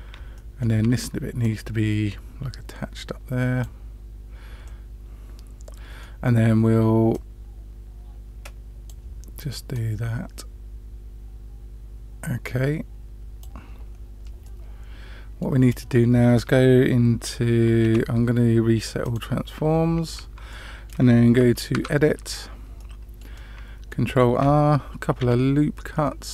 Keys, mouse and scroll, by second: 0.3-0.6 shift+middle drag, 1.4-3.6 drag, 4.6-6.0 middle drag, 7.1-8.8 drag, 9.7-13.4 drag, 14.4-15.4 middle drag, 17.8 ctrl+a, 20.5-20.9 shift+middle drag, 22.1 Tab, 22.7 middle click, 23.3 middle click, 25.2 ctrl+r.